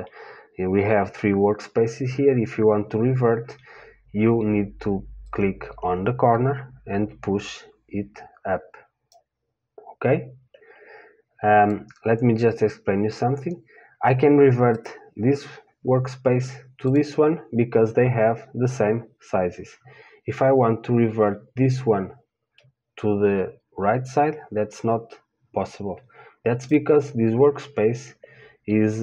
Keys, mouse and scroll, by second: 6.7 click, 12.2 click, 12.8 click, 13.8 click, 22.8-24.6 drag.